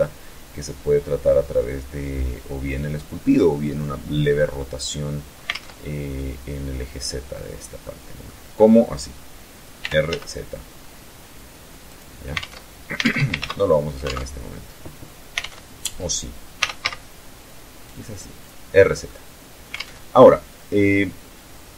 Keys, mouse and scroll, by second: 5.1 alt+Tab, 7.4-7.9 middle drag, 9.4 r, 9.6 z, 11.4 click, 11.9 alt+Tab, 12.9 ctrl+alt+z, 13.6 alt+Tab, 14.9 alt+Tab, 16.1 r, 16.4 z, 17.9 click, 18.6-19.4 middle drag, 19.4 alt+Tab.